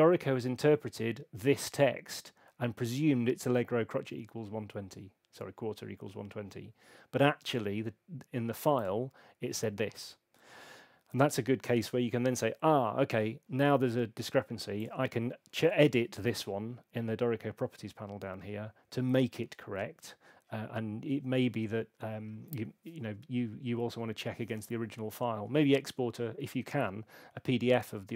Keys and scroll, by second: 15.6 super+8.